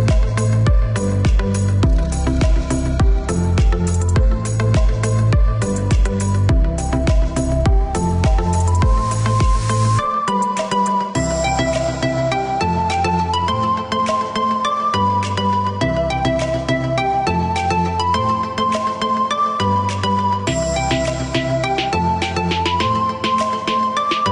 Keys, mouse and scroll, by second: 2.2 click, 3.7 space, 4.8 click, 5.5 click, 6.4 right click, 7.2 click, 7.6 space, 8.8 click, 9.5 click, 10.9-11.4 scroll down 1, 13.8 right click, 16.1 click, 18.8 click, 20.3 click, 23.8 click.